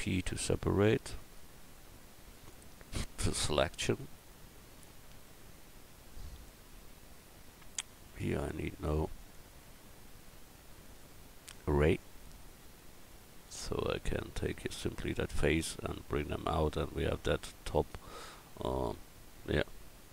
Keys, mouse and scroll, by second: 1.7 p, 3.2 Tab, 4.0-5.7 right drag, 4.8 click, 6.7 Tab.